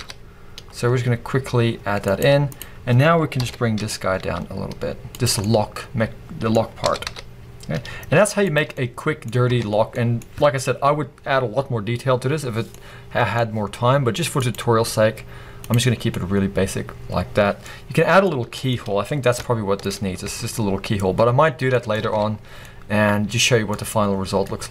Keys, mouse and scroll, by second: 2.5 click, 3.4 ctrl+l, 3.8 g, 5.2 click, 5.4 middle click, 6.8 g, 8.5 click, 8.8 middle click, 9.5 Tab, 9.7-14.4 middle drag, 9.7 scroll down 2, 10.3-12.7 scroll up 2, 14.4-16.1 drag, 15.9 scroll down 2, 16.1-20.2 middle drag, 17.6-18.2 scroll up 2, 18.8 scroll up 1, 19.9-20.2 scroll up 1, 20.2 Tab, 21.2-24.7 middle drag, 21.4 scroll down 1, 22.0 alt+a, 22.4 scroll down 1, 24.1 scroll down 1.